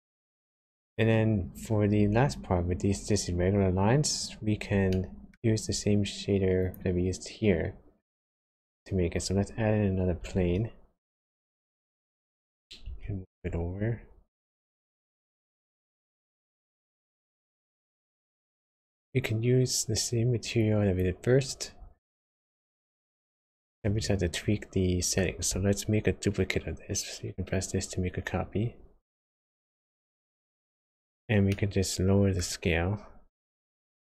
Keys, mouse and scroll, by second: 4.2-4.8 scroll down 3, 4.9 shift+middle click, 5.4-6.5 scroll up 1, 6.5 click, 8.4 click, 10.1 shift+a, 12.8 g, 16.0 middle click, 16.8 shift+middle click, 17.2 shift+scroll up 1, 18.8 click, 22.1 middle click, 25.4-28.4 scroll up 1, 29.7 click, 31.4 middle click, 32.9-34.0 scroll up 6.